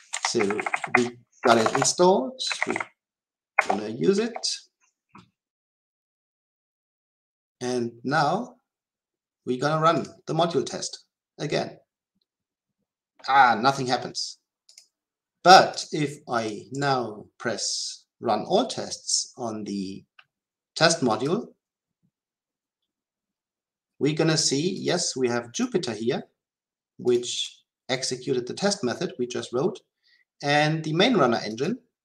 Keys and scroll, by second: 0.3 Delete, 2.5 Delete, 10.0 shift+F10, 21.2 ctrl+shift+F10.